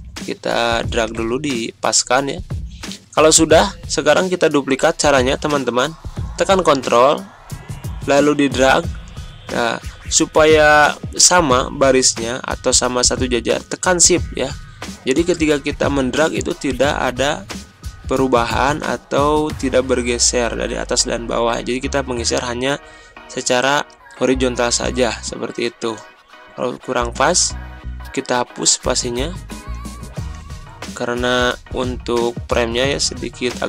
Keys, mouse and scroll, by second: 6.2-8.0 drag, 8.0-18.0 ctrl+drag, 25.6 click, 26.5 space, 27.8 BackSpace, 29.6 BackSpace, 31.7-33.6 drag.